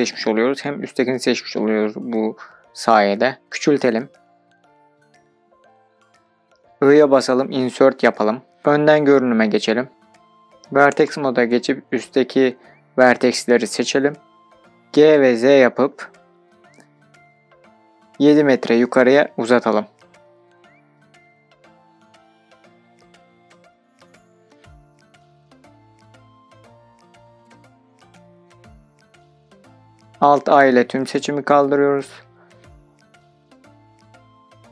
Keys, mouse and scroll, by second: 3.1 Escape, 3.5-4.6 scroll down 1, 4.6-6.5 scroll down 1, 6.6 i, 8.5 click, 9.8 scroll down 1, 10.4 scroll down 3, 10.5 shift+middle click, 11.6-12.0 scroll up 2, 12.2 shift+middle click, 12.8 scroll up 2, 13.2 1, 13.9 click, 14.8 g, 15.0 middle click, 18.9 KP_7, 19.5 KP_Enter, 20.5 scroll down 2, 21.8 scroll down 9, 22.5-23.7 scroll down 2, 23.7-24.2 scroll down 1, 25.2 shift+scroll up 1, 25.3 shift+middle click, 26.1-27.2 scroll up 1, 30.3 alt+a, 34.5 Tab.